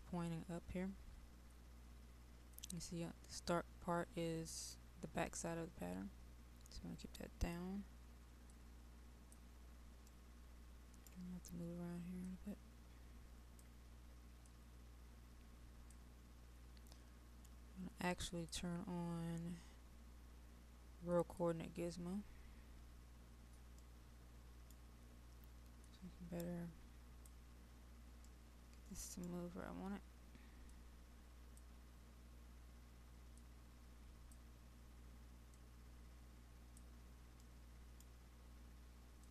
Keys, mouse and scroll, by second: 10.2 right click, 12.3-22.2 drag, 23.8-25.2 right drag, 25.8-28.3 drag, 28.3-30.3 right drag, 30.8-37.4 drag, 37.5 right click, 39.2-39.3 drag.